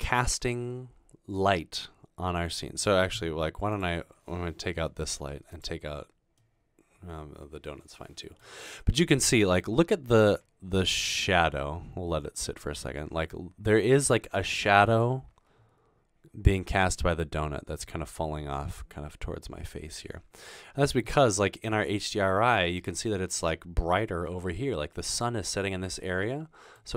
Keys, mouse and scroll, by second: 5.1 Delete, 8.8 scroll down 1, 20.5-21.5 scroll down 2, 21.5-22.9 middle drag, 26.2 middle click, 26.6-26.9 scroll down 4.